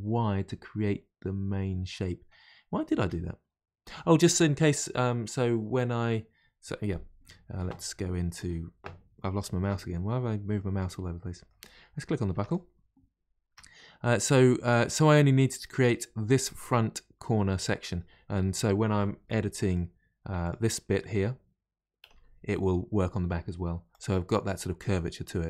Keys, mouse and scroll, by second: 10.4-11.1 scroll up 4, 11.1 middle click, 11.6-12.1 scroll down 1, 12.1 scroll down 1, 12.3 Tab, 12.4 click, 13.0-13.4 scroll down 1, 13.4 Tab, 13.7-19.6 middle drag, 19.6 click, 20.3 2, 20.3 click, 20.8-21.9 middle drag, 21.9 g.